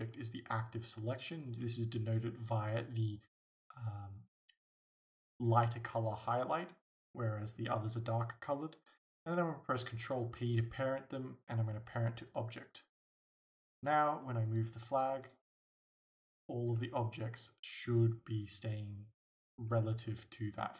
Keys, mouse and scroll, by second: 10.0 ctrl+p, 14.5-15.3 right drag, 15.7 g.